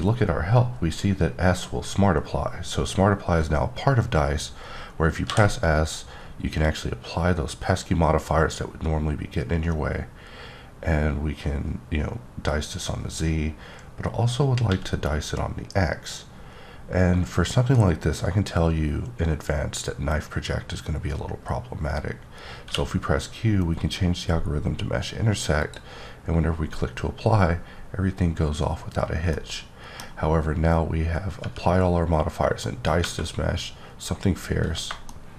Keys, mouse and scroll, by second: 5.3 s, 7.1-8.0 scroll down 2, 8.0-9.6 scroll up 2, 9.6-10.2 scroll up 1, 14.7 x, 22.6 q, 25.6 click, 27.1-28.6 scroll up 2, 28.6-29.3 scroll down 1, 29.3 middle click, 30.1 scroll up 1, 34.2-34.7 scroll down 3, 35.1 shift+middle click.